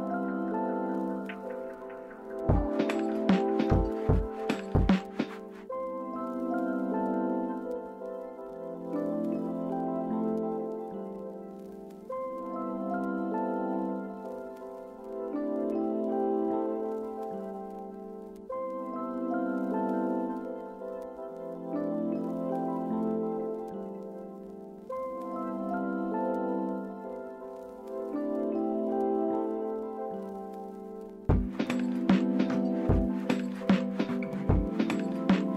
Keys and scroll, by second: 15.0 typing, 16.1 Return.